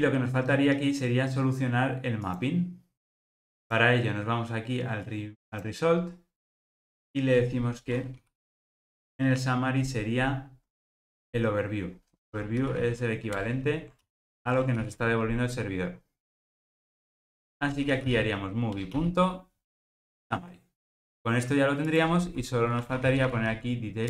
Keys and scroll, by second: 8.2 super+p, 13.3 Return, 18.8 Return.